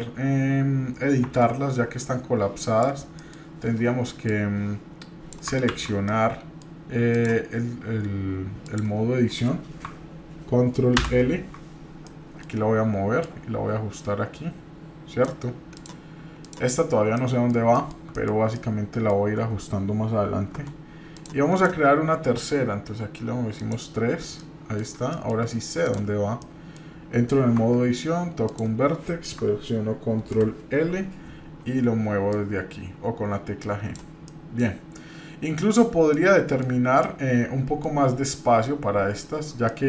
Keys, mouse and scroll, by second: 1.2 Tab, 2.0 click, 3.1 middle click, 4.3-5.3 drag, 5.7 ctrl+z, 6.1 middle click, 7.1 click, 8.6 click, 10.9 ctrl+l, 12.1 middle click, 13.2-15.3 drag, 15.7 click, 16.4 click, 17.1 middle click, 17.7 shift+middle click, 18.1 middle click, 18.3 scroll down 1, 18.5 middle click, 20.6 Tab, 21.1 click, 21.5 click, 23.6 click, 24.4-24.8 middle drag, 25.1 shift+middle drag, 25.8 click, 26.4 middle click, 27.6 Tab, 28.4 click, 30.2 ctrl+l, 30.2 ctrl+k, 32.3-34.0 drag, 34.2 middle click, 35.9 scroll down 1, 36.1 middle click, 37.0 middle click, 39.6 middle click.